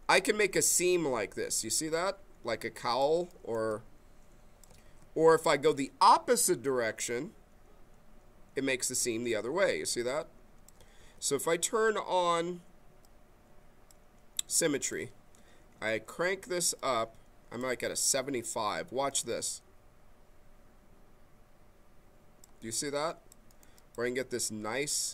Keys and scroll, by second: 4.8 ctrl+z, 10.9 ctrl+z.